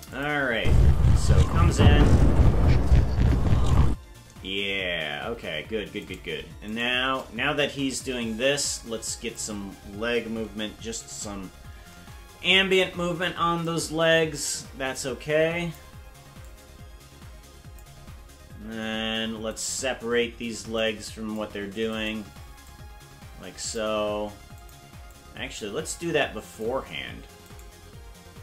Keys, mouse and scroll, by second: 0.1 click, 0.5 space, 3.9 space, 6.1 right click, 6.8 shift+right click, 7.6-9.4 drag, 10.4 KP_Decimal, 11.2-11.8 scroll down 10, 13.6-15.7 drag, 16.4-17.8 drag, 19.7 right click, 20.7 click, 22.1 right click, 22.6-23.8 drag, 24.6 click, 25.1-26.6 drag, 27.7 right click.